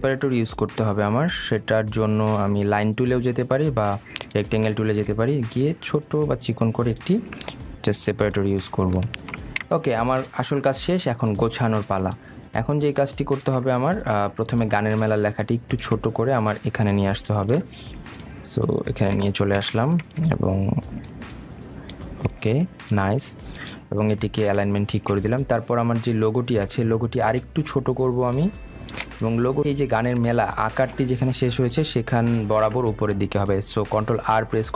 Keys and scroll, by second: 0.5 shift+Up, 33.5 ctrl+r.